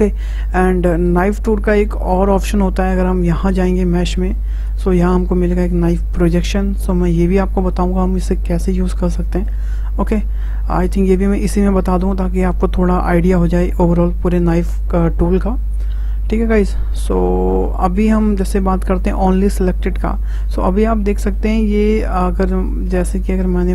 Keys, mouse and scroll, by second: 3.5-6.7 drag, 20.3-20.7 scroll down 2, 20.7-21.8 middle drag, 21.8 click, 23.2 click.